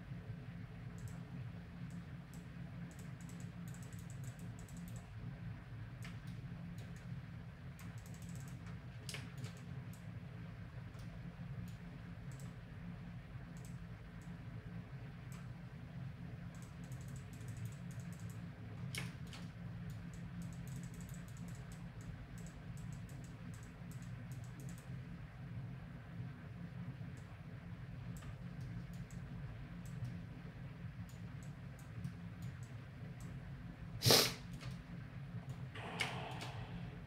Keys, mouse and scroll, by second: 6.3-8.1 middle drag, 7.0-11.3 drag, 9.1-12.8 middle drag, 12.3-26.4 drag, 18.6-21.3 middle drag, 19.1 right click, 26.4 middle click, 27.2-29.1 drag, 28.6 right click, 28.9 middle click, 29.3-30.9 drag, 29.7-30.8 middle drag, 29.7-30.8 right drag, 30.9 middle click, 31.4-35.2 drag, 34.3-36.1 middle drag.